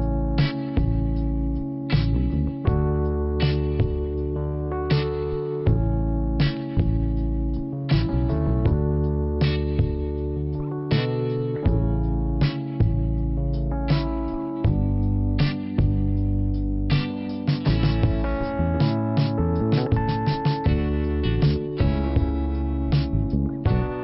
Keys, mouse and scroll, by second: 0.6 click, 0.8 click, 1.9 click, 3.3 click, 6.8 click, 6.9 double click, 7.5 double click, 8.9 click, 12.4 click, 15.0 click, 18.1 click, 18.9 click, 22.7 click.